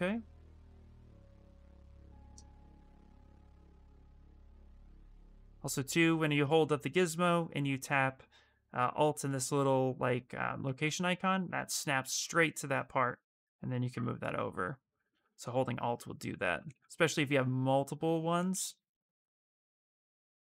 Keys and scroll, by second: 4.7 w, 18.8 q, 19.9 w.